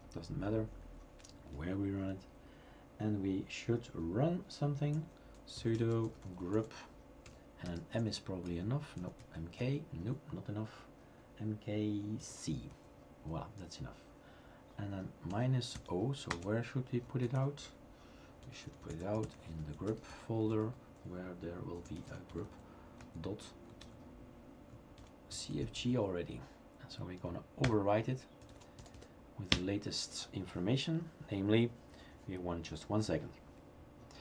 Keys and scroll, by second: 5.0-7.6 typing, 7.9 Tab, 8.4 Tab, 8.7-9.5 typing, 9.6 Tab, 12.3 typing, 12.7 Tab, 15.7-22.8 typing, 23.0 Tab, 25.3-26.0 typing, 27.7 Return, 28.2-29.4 typing, 29.5 Return.